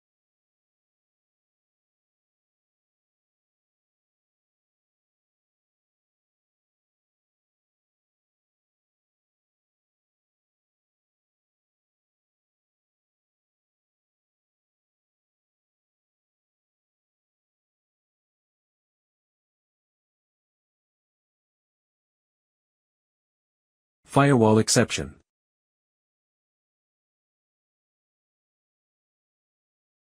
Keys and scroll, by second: 0.7 super+d, 21.8 super+d, 28.3 Return, 28.8-30.0 typing.